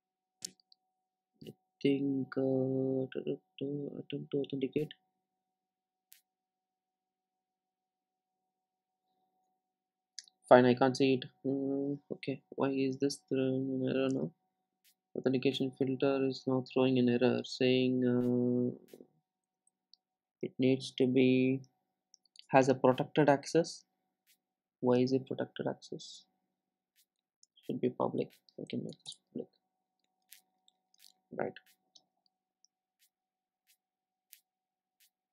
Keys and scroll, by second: 14.2 super+b, 19.7 super+e, 25.0 super+b.